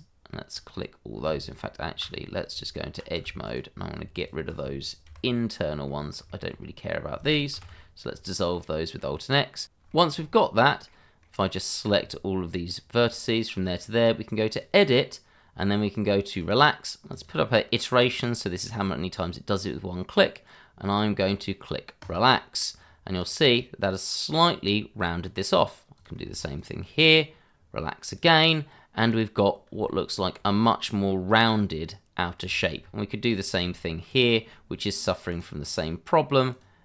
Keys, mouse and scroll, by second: 1.4 alt+click, 1.5 click, 2.5 Tab, 3.6 click, 4.1 shift+click, 5.0 /, 5.8 middle click, 6.4 shift+middle click, 6.5 shift+scroll up 2, 7.5 ctrl+x, 8.1 scroll up 1, 8.5 middle click, 9.6 click, 9.9 shift+middle click, 10.1 scroll up 1, 10.5 middle click, 12.6 ctrl+click, 13.4 click, 14.5 click, 16.4 click, 22.0 click, 23.3 click, 24.9 middle click, 25.9 click, 26.5 ctrl+click, 26.6 click, 29.8 shift+middle click, 32.2 scroll down 1, 32.5 shift+middle click, 32.8 scroll up 1, 33.3 click, 35.9 middle click, 36.5 click.